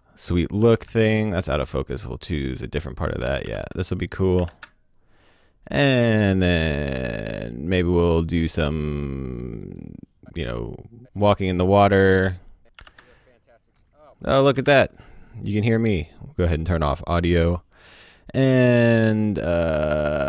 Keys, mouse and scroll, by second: 0.6 o, 0.7 space, 0.8 click, 3.4 i, 3.5 space, 4.4 o, 4.5 space, 4.6 click, 7.5-8.2 scroll down 1, 8.2 click, 9.9 click, 12.8 space, 14.4 o, 14.5 space, 14.7 click, 19.0-20.2 scroll up 1.